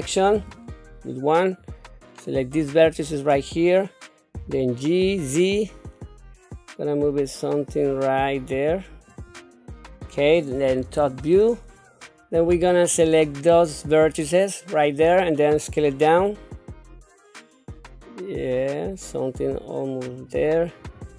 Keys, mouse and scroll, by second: 0.4 1, 1.6 click, 1.8 click, 4.3 g, 10.8 KP_7, 13.0 click, 13.8-14.8 drag, 15.7 s, 20.9 click.